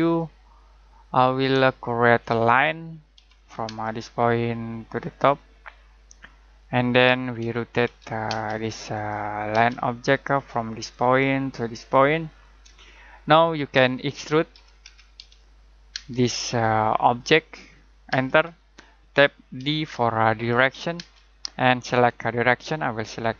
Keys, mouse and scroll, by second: 1.2-1.5 scroll down 1, 1.7 middle click, 2.2 middle click, 3.2 l, 3.6 space, 5.1 click, 7.1-8.3 typing, 8.5 click, 9.5 space, 10.7 click, 12.8 middle click, 13.9 middle click, 14.5-14.8 typing, 15.9 space, 18.1 space, 19.6 d, 20.9 space.